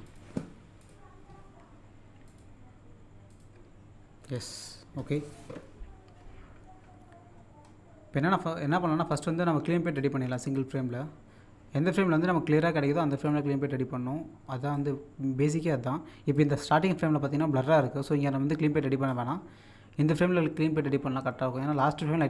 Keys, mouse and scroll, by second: 2.2 click, 7.2-8.5 scroll up 1, 8.9 middle click, 10.0-11.8 drag, 13.2-15.0 drag, 15.0-16.1 scroll down 1, 16.3 click, 17.2-17.8 scroll up 1, 19.1-22.2 drag.